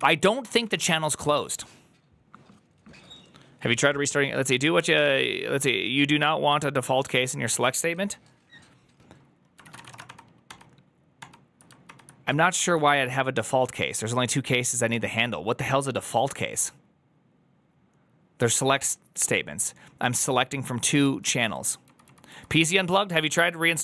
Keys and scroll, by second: 0.0 ctrl+c, 0.4 typing, 9.7-10.4 typing, 11.7 ctrl+d, 12.8 ctrl+d.